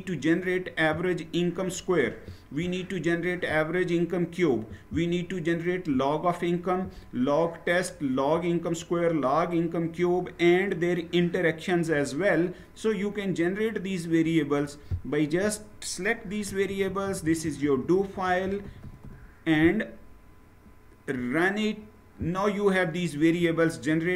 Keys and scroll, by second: 16.0 shift+Down, 16.2 shift+Down.